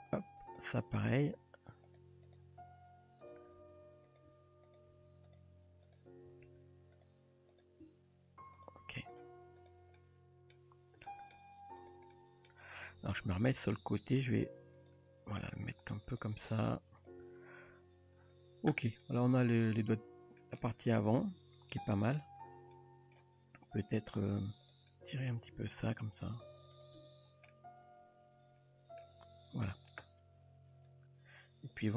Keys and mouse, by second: 1.4 r, 2.2 click, 2.7 r, 3.6 r, 4.3 g, 4.9 r, 5.8 click, 6.3 r, 7.9 g, 9.6 click, 10.0-10.6 middle drag, 11.1 shift+middle drag, 12.2 middle click, 13.2 KP_3, 14.2 g, 15.7 g, 17.7 Tab, 19.0-20.4 middle drag, 21.3 Tab, 22.4 click, 22.7-23.2 middle drag, 24.0 click, 24.6 click, 24.9-25.3 middle drag, 25.5 g, 27.0 Tab, 27.5-29.0 middle drag, 30.4 Tab.